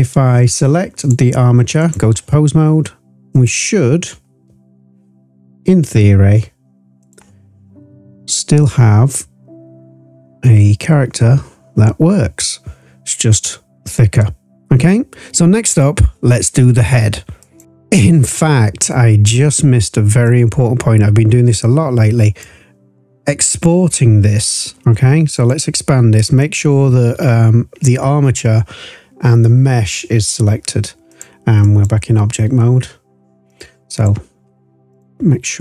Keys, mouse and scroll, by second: 0.9-1.9 drag, 3.3 click, 5.7 e, 7.0 click, 8.6 click, 17.6 ctrl+z, 18.8-19.2 scroll up 2, 20.2 click, 20.4-22.4 drag, 23.4 click, 25.3 click, 31.0-31.8 drag, 33.4 drag, 33.9 click, 34.9 shift+click.